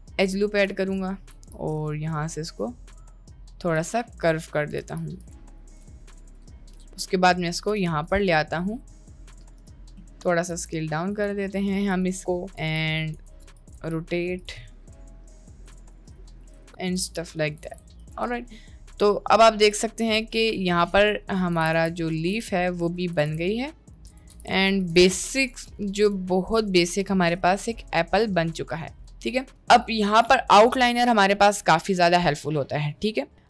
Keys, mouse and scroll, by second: 0.4 click, 1.4 g, 4.4 click, 4.8 g, 5.8 g, 6.3 Tab, 6.7 g, 7.8 s, 9.5 KP_Decimal, 10.0 middle drag, 10.5 s, 11.9 click, 12.4 shift+middle click, 12.6 g, 13.2 r, 13.8 g, 14.7-15.7 middle drag, 15.7-17.6 typing, 18.7 middle click, 20.1 s, 21.0 middle click, 21.6 g, 22.4 g, 23.2 g, 24.5 g, 25.0 g, 26.4-28.8 middle drag, 31.0 click.